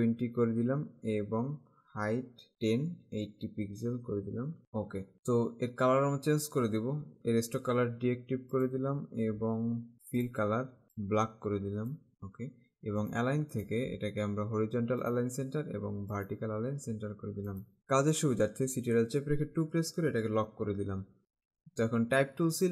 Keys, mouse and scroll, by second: 2.0 Tab, 2.6 typing, 4.5 typing, 5.0 KP_Enter, 7.2 click, 8.6 click, 10.2 click, 11.1 click, 13.2 click, 15.2 click, 17.6 click, 19.0 ctrl+Caps_Lock.